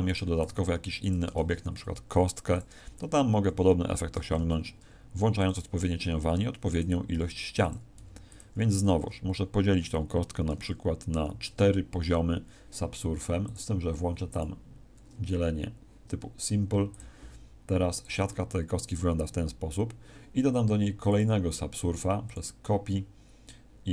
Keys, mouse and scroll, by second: 0.0 right click, 0.4 s, 1.3 click, 1.3 shift+a, 4.0 g, 5.4 click, 5.7 s, 6.7 click, 7.0 g, 7.6 click, 7.9 s, 8.3 click, 11.1 ctrl+4, 13.4 click, 14.2 click, 16.8 click, 17.9 click, 21.0 click, 22.2 click.